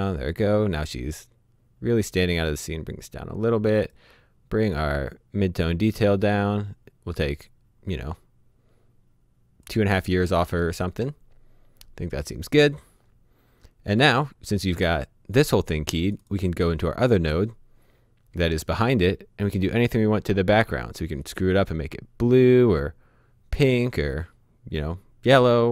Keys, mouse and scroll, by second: 0.0-1.6 scroll down 1, 2.5 click, 10.0-10.6 scroll down 1, 10.6 middle click, 11.7-12.9 scroll up 1, 13.9 click, 16.0 click, 19.8 click.